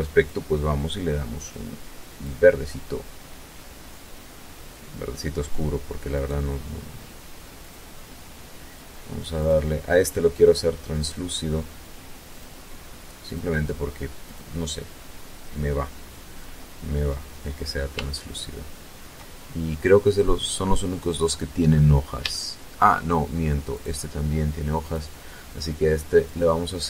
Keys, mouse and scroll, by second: 0.3 click, 2.1-2.4 scroll down 1, 2.6-2.9 scroll down 1, 4.9 right click, 6.3 click, 8.1 click, 11.1 click, 12.0 click, 13.0 click, 13.9-14.2 scroll down 1, 15.7-16.0 scroll up 1, 16.8-18.1 shift+middle drag, 18.1-18.7 shift+scroll down 4, 18.9 middle click, 20.0-20.7 scroll up 2, 21.1 shift+middle click, 22.5 right click, 23.6 click, 25.0 click, 26.7 click.